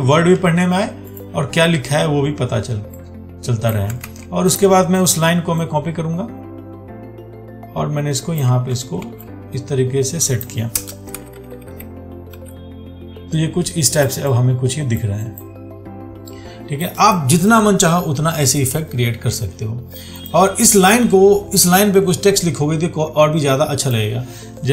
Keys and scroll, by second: 4.3 ctrl+z, 9.3 ctrl+t.